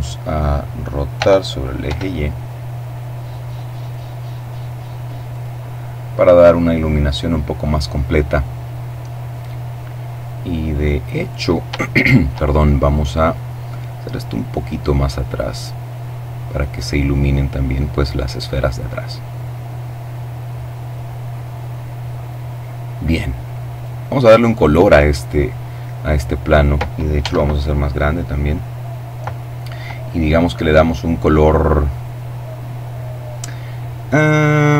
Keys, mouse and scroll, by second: 0.2 r, 1.0 y, 4.4 click, 8.4-10.4 middle drag, 11.0 shift+right click, 12.0-16.3 drag, 18.5 middle click, 19.8 middle click, 21.0-22.7 middle drag, 21.0-21.8 scroll up 2, 21.9-22.4 scroll down 2, 22.7 right click, 26.2 s, 27.0 click, 27.6 click.